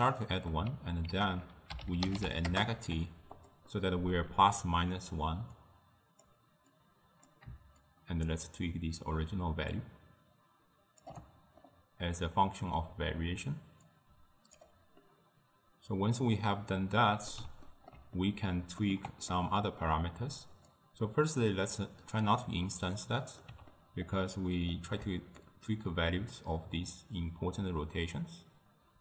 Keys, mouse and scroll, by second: 0.2-1.2 middle drag, 1.2 ctrl+a, 3.7-5.6 middle drag, 5.6-11.0 drag, 11.7-13.9 middle drag, 13.9-15.0 drag, 15.0-20.7 middle drag, 20.7-22.7 drag, 22.7-25.5 middle drag, 25.5-28.5 shift+drag.